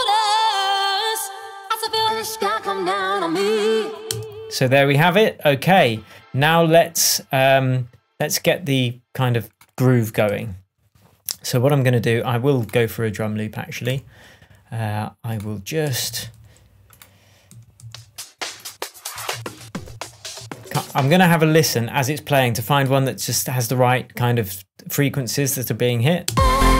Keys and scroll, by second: 1.9 super+d, 4.1 space, 10.4 super+t, 13.8 Right, 15.8 Up, 17.5 Right, 17.8 Down, 19.3 Down, 21.0 space, 26.2 space.